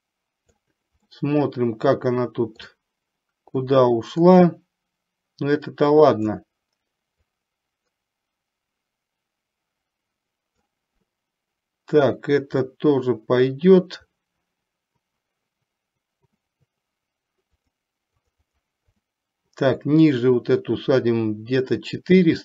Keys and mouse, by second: 1.1-2.9 middle drag, 3.6-6.4 drag, 7.4-10.8 drag, 12.9-14.1 middle drag, 17.6 click, 18.4 click.